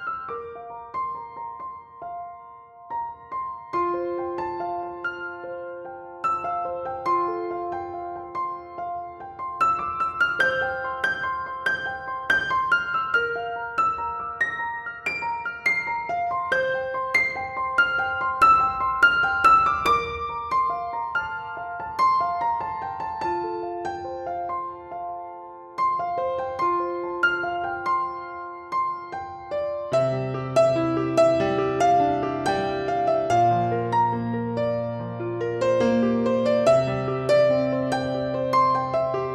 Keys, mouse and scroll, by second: 0.2-3.6 middle drag, 3.6 click, 4.2 click, 6.2 click, 16.1-16.6 scroll up 1, 17.2 scroll down 1, 18.2-26.0 middle drag, 21.8 ctrl+i, 22.9-23.7 scroll down 1, 24.2 scroll up 1, 26.0 z, 26.2 KP_1, 26.8-27.2 scroll down 1, 27.2-33.7 shift+middle drag, 27.5-28.4 shift+scroll up 1, 28.4 alt+z, 32.0-32.4 scroll down 1, 32.8-33.3 scroll up 2, 33.7-34.1 scroll up 1, 34.1 b, 37.2-37.6 scroll down 1, 37.6 shift+middle click, 39.1 scroll up 1.